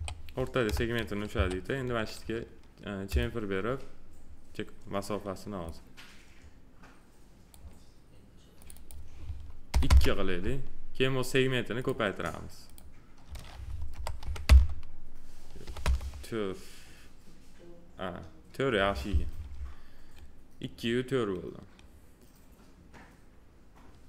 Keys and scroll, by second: 9.6 2, 9.8 Return, 13.9 BackSpace, 14.1 4, 14.4 Return, 15.6 4, 15.8 Return.